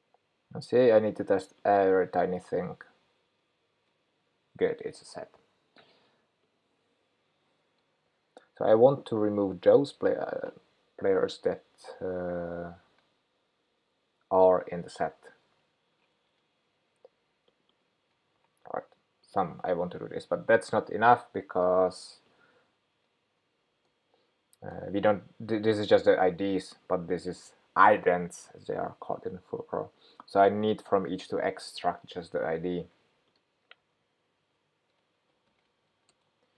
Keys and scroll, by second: 18.4 super+c, 20.0 super+v, 34.5 shift+super+9.